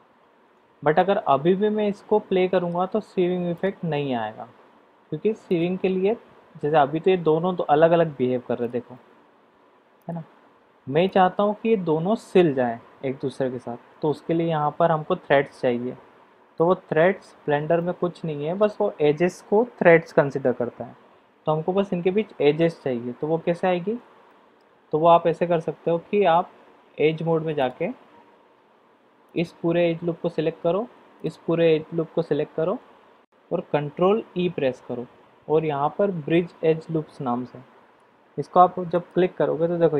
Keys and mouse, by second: 0.5 Tab, 0.9-2.7 middle drag, 5.6 click, 8.6 click, 10.1 click, 11.2 click, 16.5-17.2 middle drag, 17.7-21.5 middle drag, 23.3 Tab, 24.2 middle click, 27.6 click, 34.3 ctrl+e.